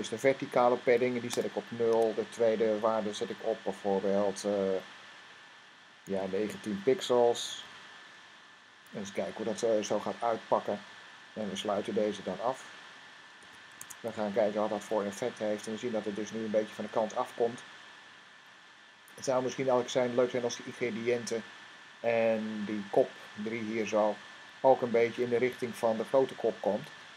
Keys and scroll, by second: 1.1-2.2 typing, 5.6-8.5 typing, 11.4 }, 13.1 s, 13.5 Tab, 14.5 r, 24.8 Tab.